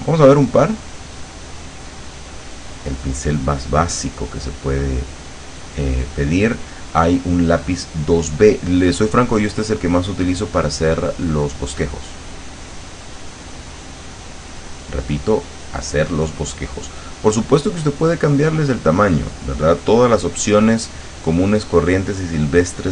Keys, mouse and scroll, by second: 0.6-1.8 drag, 3.4 click, 10.0 click, 12.0-13.1 drag, 13.4 click, 14.4-16.0 drag, 16.1 click.